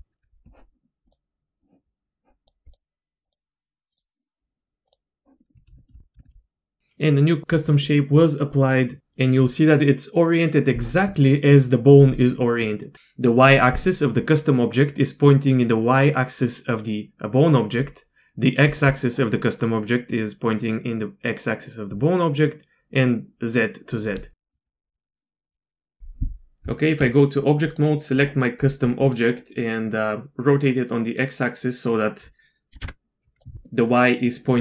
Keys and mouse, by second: 1.1 click, 2.4 click, 2.7-5.3 drag, 5.4 middle click, 5.8 shift+middle click, 6.2 shift+middle click, 12.6 middle click, 12.9 ctrl+z, 18.7 d, 24.6 shift+middle click, 25.2 middle click, 26.6 Tab, 27.7 click, 29.0 click, 30.7-33.4 drag, 33.7 middle click.